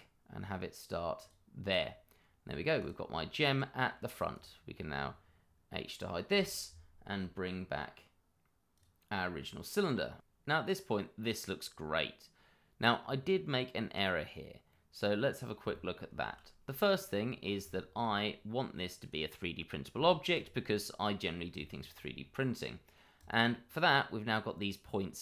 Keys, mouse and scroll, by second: 1.2 click, 1.8 middle click, 2.7 click, 3.4 middle click, 4.3 click, 6.2 h, 8.2 click, 9.8 middle click, 16.7 middle click, 17.4 scroll up 1, 17.6 shift+middle click, 18.0-19.0 scroll up 1, 19.0 click, 19.4 middle click, 20.2 shift+middle click, 20.9-21.4 scroll up 1, 21.6 shift+middle click, 21.7 middle click, 21.8 shift+middle click, 22.1-23.1 scroll up 1, 23.1 click, 23.7-25.2 scroll up 1.